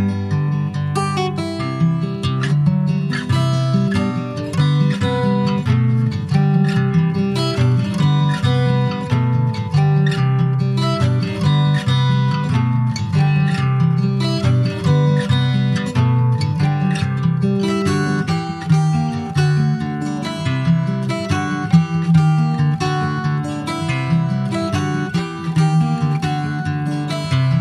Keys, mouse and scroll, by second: 0.6 Tab, 1.0 click, 1.4 middle click, 1.9 ctrl+s, 2.3 click, 3.1-5.0 middle drag, 5.0 Tab, 5.3 click, 6.4 3, 6.6 click, 7.1 alt+middle click, 8.2 ctrl+s, 10.0-11.4 drag, 12.4-14.0 middle drag, 14.4 alt+middle click, 15.2 click, 17.3 e, 20.3 middle click, 20.7 2, 21.0 click, 21.6 click, 22.0 alt+shift+click, 22.4 alt+middle click, 22.8 alt+middle click, 23.8 click, 25.7 middle click, 26.0-26.8 scroll up 2, 26.2 shift+middle click, 26.8 2, 27.0 click.